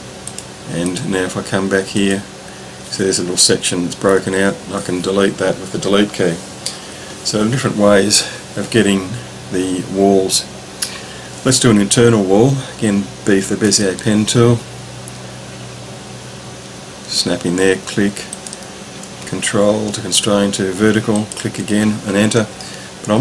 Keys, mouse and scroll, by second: 0.2 drag, 4.1 Delete, 13.7 b, 18.3 click, 21.3 ctrl+click, 22.2 Return.